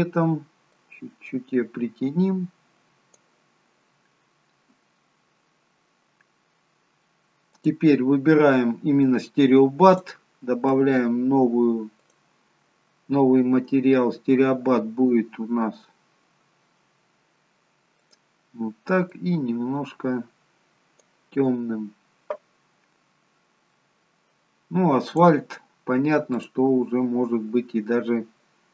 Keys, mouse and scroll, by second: 7.4 click, 9.9 click, 25.1 click, 27.0 click.